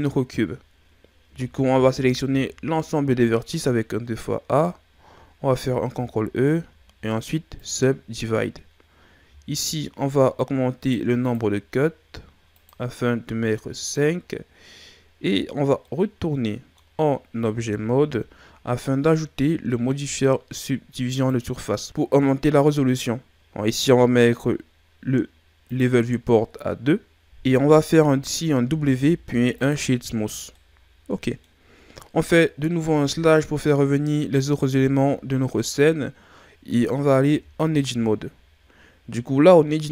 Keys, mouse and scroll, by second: 1.2 a, 1.7 a, 5.6 ctrl+e, 10.8-15.8 drag, 15.8-17.5 middle drag, 17.5 Tab, 21.1 click, 25.6 click, 28.6 w, 30.5-32.8 middle drag, 32.8 KP_Divide, 35.0-35.8 shift+scroll down 1, 35.8 scroll up 1, 37.2 Tab.